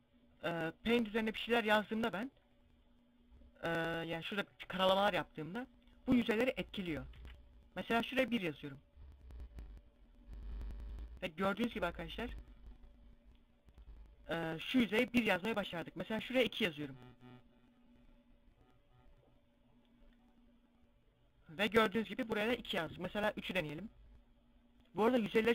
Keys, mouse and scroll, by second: 3.8 click, 6.8 ctrl+z, 8.3 click, 16.3 click.